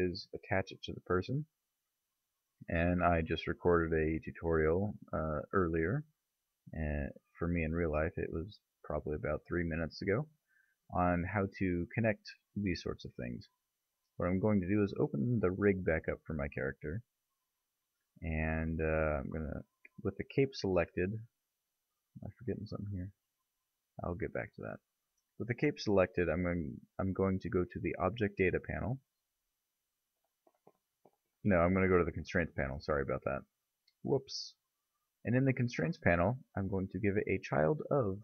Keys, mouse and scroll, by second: 1.5 click, 3.9 middle click, 4.7-7.3 middle drag, 14.9 click, 16.9-18.0 middle drag, 22.3-26.7 middle drag, 26.7 click, 27.6 click, 32.8 click, 36.5 click.